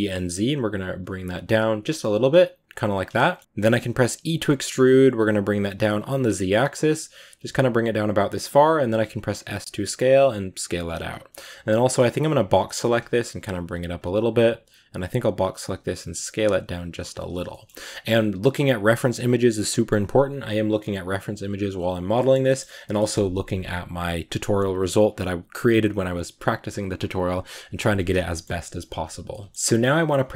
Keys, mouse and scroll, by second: 3.0 shift+middle click, 3.2-4.0 scroll down 2, 4.0 e, 8.5 s, 11.1-12.4 shift+middle drag, 12.4 b, 12.7 g, 13.9 a, 15.4 b, 15.7 s, 17.3 shift+middle click, 17.5-21.2 scroll up 2, 17.6 a, 21.2 scroll up 1, 28.1-30.3 shift+middle drag.